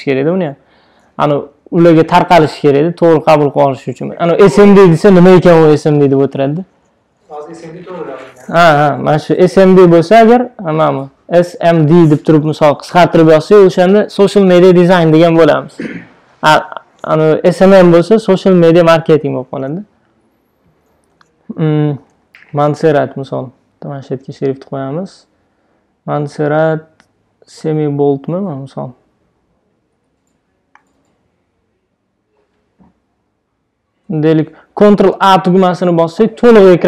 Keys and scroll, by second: 35.3 super+a, 36.5 super+a.